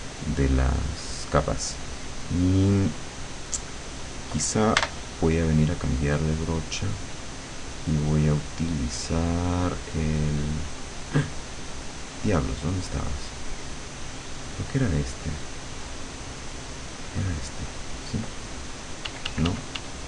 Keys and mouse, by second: 4.9 b, 6.7 click, 9.1 click, 17.1 click, 19.1 d.